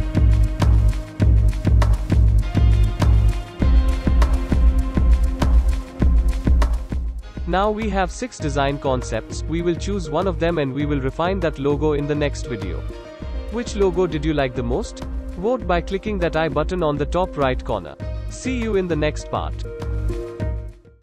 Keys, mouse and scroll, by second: 0.9 ctrl+a, 1.9 click, 3.4 click, 4.4-16.2 typing, 5.6 Down, 5.9 Return, 17.4 click.